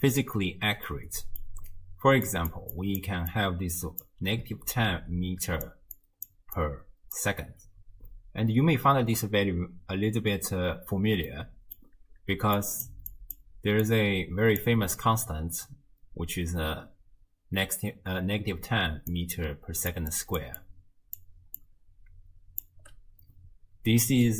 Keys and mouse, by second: 1.0 middle click, 2.0-7.4 typing, 2.3 click, 2.8 click, 3.3 click, 4.7 click, 6.0 click, 6.6 click, 11.3 middle click, 11.4 click, 11.5 middle click, 11.7 click, 11.7 middle click, 12.3-13.8 d, 12.6 click, 13.1 click, 13.8 click, 14.6 d, 14.7 d, 18.6 d, 19.1 click, 19.9-22.8 typing, 20.1 click, 20.6 click, 21.6-22.6 drag.